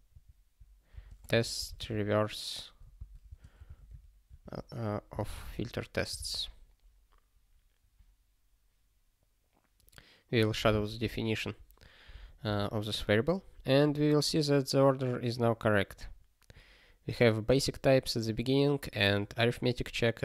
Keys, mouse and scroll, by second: 1.0 space, 1.3 (, 3.0 Return, 3.2 space, 3.5 f, 4.4 alt+/, 5.2 ctrl+s, 11.0 super+o.